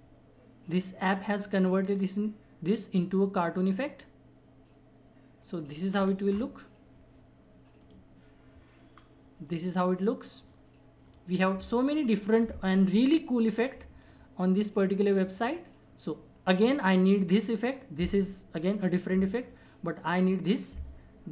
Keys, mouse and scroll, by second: 6.1 scroll down 1, 6.3-7.8 scroll up 1, 7.8 click, 8.9 scroll down 1, 10.4 click, 19.5 click.